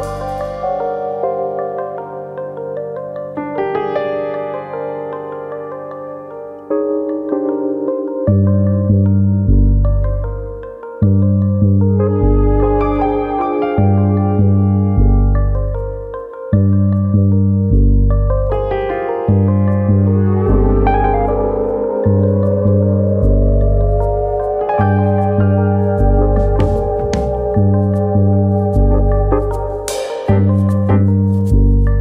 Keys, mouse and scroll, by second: 0.7 middle click, 1.2 click, 1.7 click, 2.4 middle click, 3.0 middle click, 3.4 shift+middle click, 3.8 shift+middle click, 4.5 click, 4.9 shift+click, 5.7 j, 6.0 middle click, 6.5 click, 6.8 shift+click, 7.8 j, 8.2 middle click, 9.7 middle click, 12.3 click, 13.1 click, 13.4 middle click, 13.8 shift+middle click, 14.1 middle click, 15.3 e, 16.3 click, 16.6 right click, 18.1 middle click, 18.6 shift+middle click, 19.4 click, 20.2 click, 25.1 click, 25.7 middle click, 26.1 shift+middle click, 26.4 middle click, 27.6-28.0 scroll up 2, 28.0 middle click, 28.9 e, 30.0 click, 30.1 scroll down 2, 30.3 shift+middle click, 31.3 e.